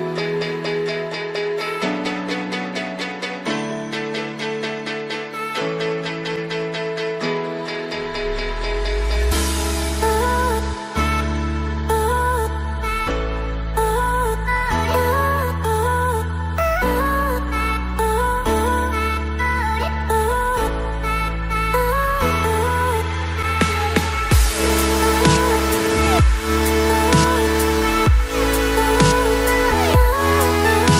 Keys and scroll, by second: 17.2 ctrl+z, 28.0 ctrl+g, 30.6 ctrl+j.